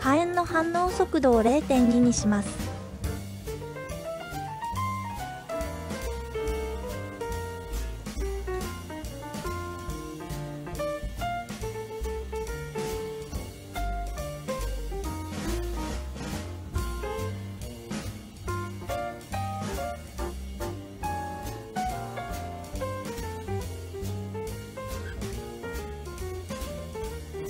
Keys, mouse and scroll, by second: 0.4-5.3 drag, 7.1-8.2 drag, 9.2 space, 20.7 space, 21.4-22.7 middle drag, 23.3-25.1 drag, 25.4-26.2 drag, 27.1-27.4 middle drag.